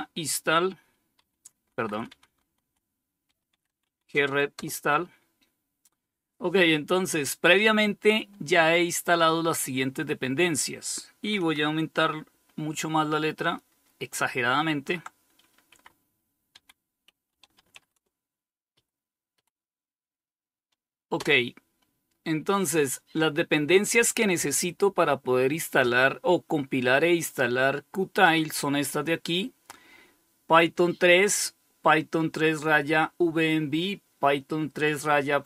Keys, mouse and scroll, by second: 0.4 Up, 0.6-3.5 typing, 1.5 Left, 1.8 Left, 3.8 Return, 11.6 ctrl++, 12.1 ctrl++, 13.0 ctrl++, 14.9 Up, 15.8 Down, 16.0-17.4 typing, 17.9 Up, 18.6 Up, 20.4 Return.